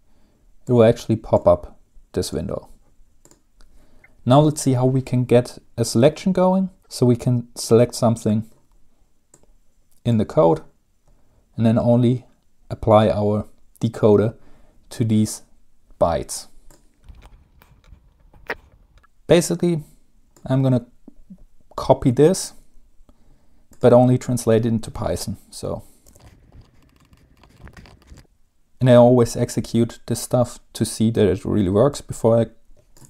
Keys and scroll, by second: 26.0-28.5 typing, 27.4 ctrl+c.